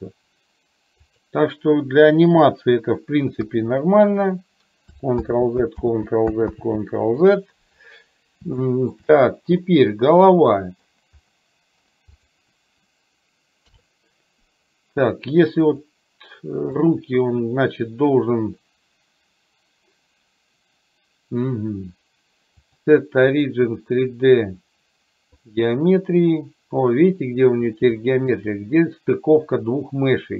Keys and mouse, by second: 3.5 KP_1, 5.3 ctrl+z, 5.9 ctrl+z, 6.5 ctrl+z, 8.8 shift+middle click, 9.6-10.9 middle drag, 11.4 middle click, 12.3 click, 13.8 KP_3, 15.6 click, 16.8 click, 22.6-25.8 drag, 28.1 shift+middle click.